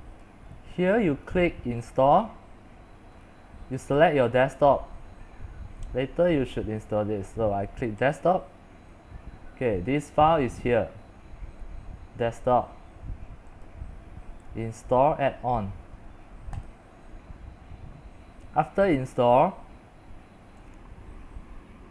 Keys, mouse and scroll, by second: 8.2-13.3 drag, 13.8-21.9 drag.